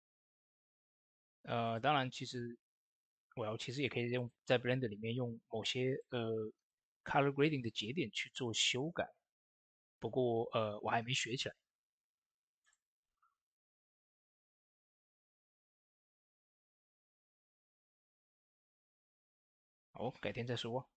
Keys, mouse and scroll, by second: 1.5 click, 4.6 Tab, 5.5-7.8 drag, 7.3-8.0 typing, 8.2 click, 12.5 click, 12.5 typing, 12.5-19.5 drag.